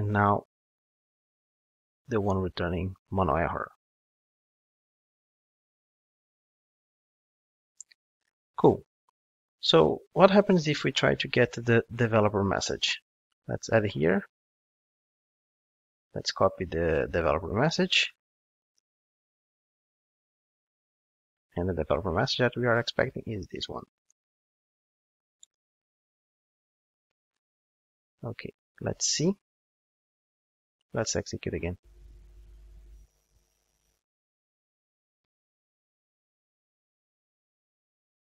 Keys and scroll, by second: 0.7 ctrl+shift+d, 12.6 super+d, 20.7 super+v, 24.1 super+v, 25.8 super+v, 28.7 super+1.